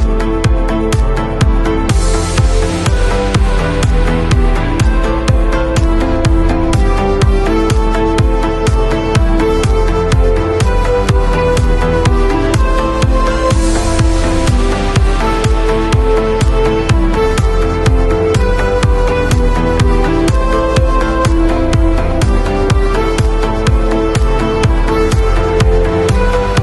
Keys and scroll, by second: 26.3 super+].